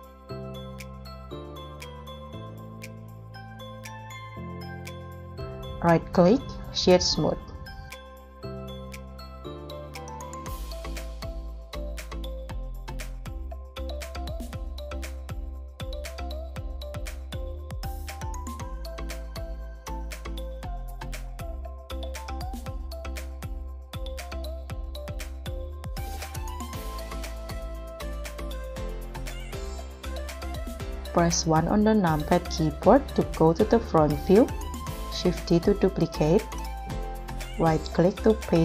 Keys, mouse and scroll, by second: 5.9 right click, 7.7 scroll down 1, 8.2 scroll up 1, 8.7 g, 9.0 z, 9.5 g, 12.0 scroll up 1, 13.0 middle click, 18.0 KP_1, 19.1 scroll down 1, 19.9 s, 24.3 middle click, 25.1-25.4 scroll down 1, 31.0 KP_1, 31.9 scroll down 1, 35.0 shift+d, 37.4 right click.